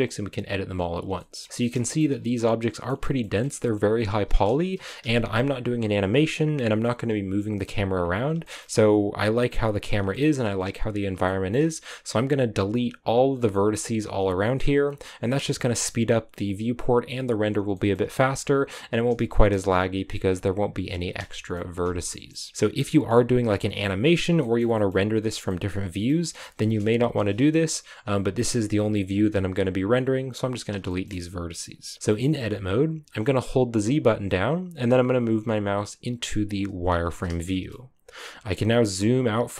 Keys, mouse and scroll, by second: 1.0-1.5 scroll up 3, 1.1 shift+middle click, 1.5 scroll down 2, 1.7 shift+middle click, 2.1 scroll down 2, 2.3 middle click, 3.2 scroll up 1, 3.3-4.6 middle drag, 4.6 KP_0, 7.8-8.3 scroll up 2, 8.3 shift+middle click, 9.2 a, 9.9 a, 10.0 shift+middle click, 10.9 scroll down 2, 11.2 shift+middle click, 11.5-13.2 scroll up 1, 13.2 scroll down 4, 13.4-14.8 shift+middle drag, 14.8-17.7 scroll up 1, 17.7 shift+middle click, 18.2-18.8 scroll up 2, 19.2-21.7 shift+middle drag, 21.7-22.0 scroll down 2, 22.0 shift+middle click, 22.8 a, 23.0-24.5 middle drag, 24.5 scroll up 2, 24.7-26.0 middle drag, 26.0 scroll down 3, 26.2 middle click, 26.9 KP_0, 27.8-29.0 scroll up 1, 29.3 scroll up 1, 30.0-30.8 scroll down 2, 30.8-36.8 shift+middle drag, 37.3 shift+middle click, 38.1-39.3 scroll down 4.